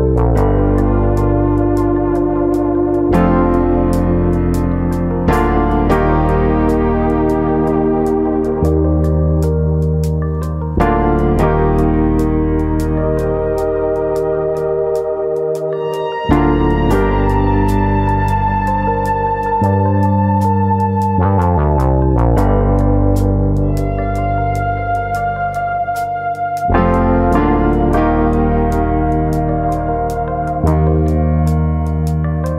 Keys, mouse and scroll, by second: 5.5 click, 6.6 click, 7.2 ctrl+KP_Add, 7.5 ctrl+KP_Add, 8.3 ctrl+KP_Add, 9.5 click, 11.3 r, 13.1 click, 13.6 click, 15.4 alt+click, 15.8 alt+click, 15.8 s, 16.6 right click, 16.9-17.3 scroll up 2, 17.3 s, 18.6 click, 18.8 middle click, 19.5 middle click, 19.8-20.5 scroll down 3, 20.1 middle click, 20.5-20.8 scroll up 1, 20.8 shift+middle click, 21.0 shift+middle click, 21.1 shift+middle click, 21.3 middle click, 23.0 alt+click, 23.8 KP_3, 24.7 click, 25.9 click, 28.0 alt+click, 28.4 alt+click, 30.4 click, 31.1 alt+click, 31.7 click.